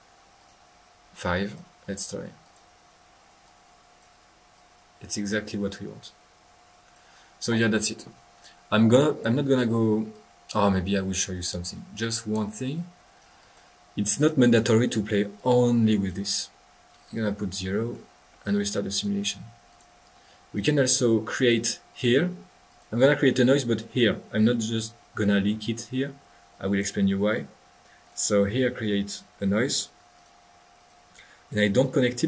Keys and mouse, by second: 0.4 drag, 1.4 click, 1.8 drag, 2.4 click, 3.4-7.0 drag, 9.0-9.5 drag, 9.5 middle click, 10.1 click, 11.4 right click, 12.0 click, 12.7 click, 13.4-14.6 drag, 13.8 middle click, 15.3 click, 17.1-18.1 middle drag, 18.3 middle click, 18.9 click, 19.7 click, 20.3 click, 21.9 click, 22.3 drag, 22.5 click, 26.5-26.9 drag, 28.0 click, 30.1 drag, 30.7 click.